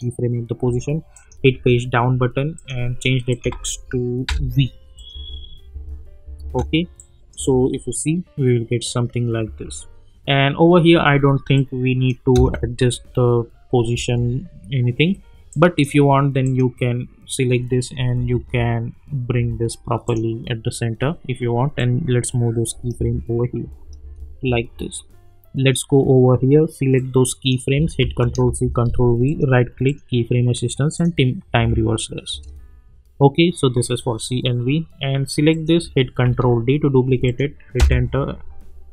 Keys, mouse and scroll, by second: 1.5 Page_Down, 2.5 click, 3.5 ctrl+a, 4.2 v, 4.9 click, 5.1 space, 6.9-7.6 click, 7.3 space, 9.4 space, 11.5-12.1 click, 12.3 space, 15.5 click, 18.2 Left, 20.0 click, 22.9 space, 24.9-25.8 drag, 28.0 ctrl+c, 28.6 ctrl+v, 29.2 right click, 29.8 click, 29.9 click, 31.6 space, 35.5 click, 36.2 ctrl+d, 37.2 click, 37.8 Return.